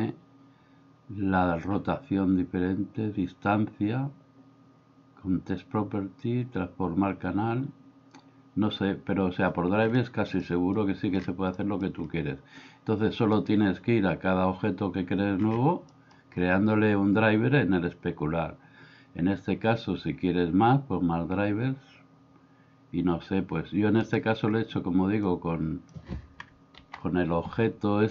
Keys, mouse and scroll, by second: 10.6 middle click, 11.5-11.9 middle drag, 16.1 middle click, 25.2-25.9 drag, 26.8 alt+g.